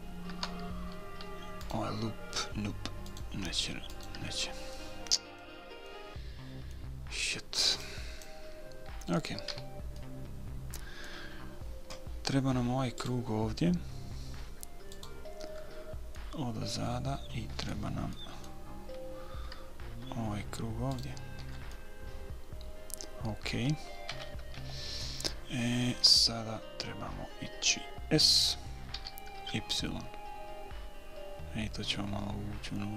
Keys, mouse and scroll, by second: 2.0-6.2 right drag, 6.2-8.3 middle drag, 10.0 a, 10.4-12.3 middle drag, 13.4-16.5 right drag, 16.5-18.5 middle drag, 18.5-20.4 middle drag, 21.3-23.0 right drag, 22.1-24.1 middle drag, 24.4 KP_1, 24.9 KP_3, 29.3 s.